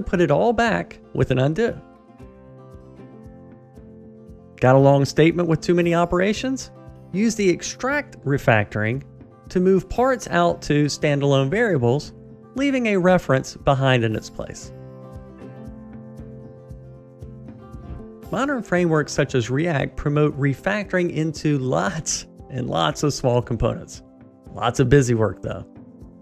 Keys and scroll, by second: 10.2 ctrl+alt+shift+t, 12.5 alt+super+v, 19.6 alt+Up, 21.6 ctrl+alt+shift+t.